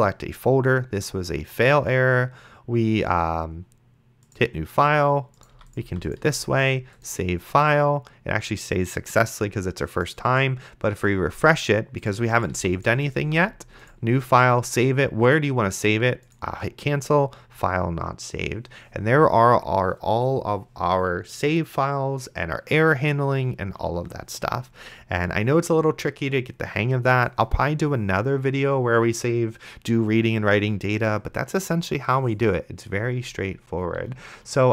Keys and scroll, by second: 5.8 d, 12.5 d.